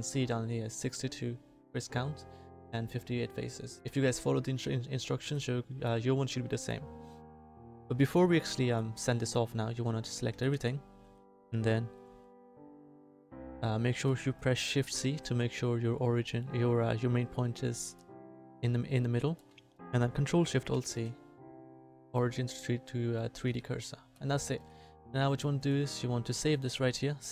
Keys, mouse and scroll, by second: 5.2 a, 10.3 a, 10.5 a, 15.1 shift+c, 23.5 ctrl+alt+shift+a, 24.4 a.